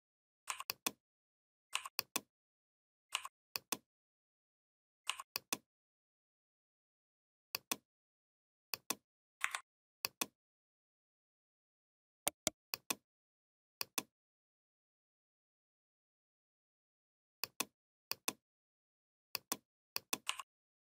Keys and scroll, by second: 9.2 Delete.